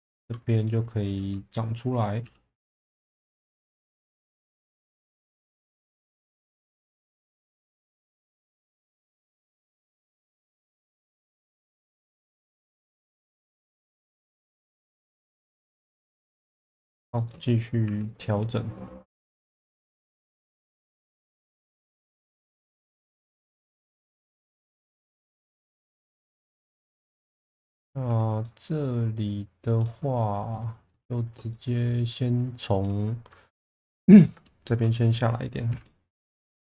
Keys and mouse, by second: 0.2 ctrl+click, 0.5 middle click, 2.3 e, 3.1 click, 3.3 1, 4.7 g, 5.3 click, 5.9 click, 6.3 shift+middle click, 7.8 f, 7.9 v, 8.7 Escape, 9.6 g, 9.7 b, 10.2 click, 11.1 click, 11.6 2, 12.1-12.5 middle drag, 12.7 shift+middle drag, 13.1-13.7 middle drag, 14.0 shift+middle drag, 14.9 middle click, 16.0 middle click, 17.2 shift+middle drag, 17.9 2, 18.1 click, 18.8 click, 20.1 click, 20.5 click, 22.0 click, 22.5 click, 24.0 middle click, 25.2 shift+middle click, 26.1 2, 26.7 click, 27.5 shift+middle click, 28.4-29.9 middle drag, 30.6 click, 30.7 click, 31.5-32.8 middle drag, 33.9 alt+middle click, 35.7 shift+v.